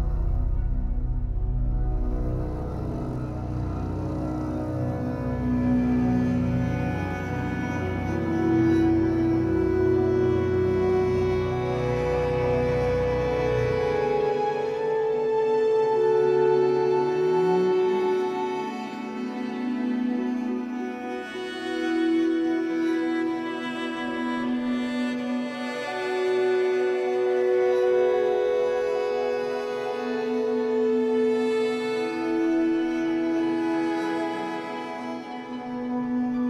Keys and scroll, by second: 13.3 ctrl+t, 24.4 ctrl+t.